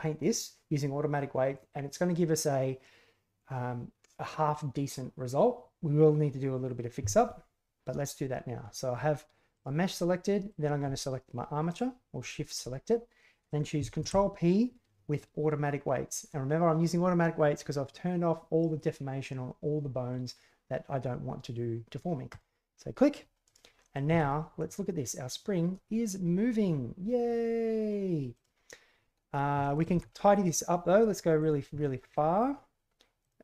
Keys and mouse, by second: 9.5 right click, 9.9-10.5 middle drag, 12.2 shift+right click, 13.9 ctrl+p, 23.4 right click, 23.7 middle click, 24.0 g, 29.6 shift+middle drag, 29.7 shift+click, 31.1 g, 31.8 middle drag, 32.1-32.4 middle drag, 33.2 right click.